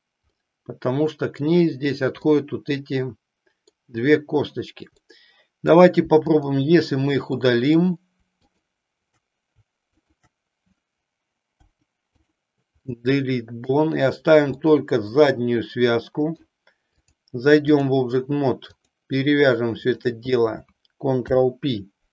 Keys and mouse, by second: 0.3-1.5 middle drag, 2.3-3.8 middle drag, 5.0 middle click, 6.3 click, 7.3 middle click, 9.9 shift+click, 11.5 Delete, 13.0 middle click, 14.6 middle click, 17.1 click, 18.6 click, 19.8 shift+click, 21.3 ctrl+p.